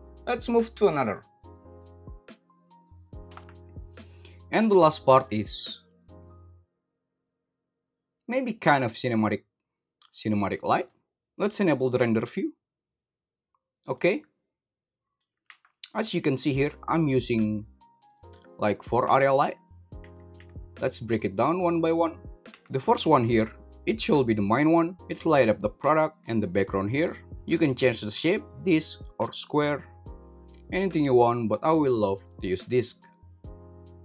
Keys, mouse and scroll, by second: 12.3 click, 13.9-15.1 middle drag, 16.4 middle drag, 18.0 click, 18.7 click, 19.1 g, 19.9 Escape, 22.5 g, 24.7 right click, 26.2 g, 26.9 right click, 28.0-29.5 drag, 31.0-32.2 drag.